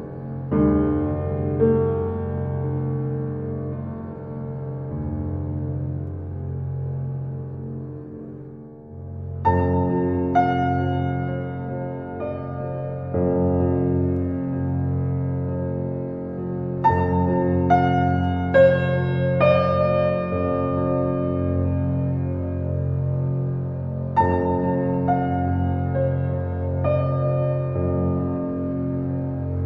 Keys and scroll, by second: 10.9 ctrl+s, 15.6 p, 15.8 r, 16.0 o, 16.2 j, 24.4 u, 26.7 alt+].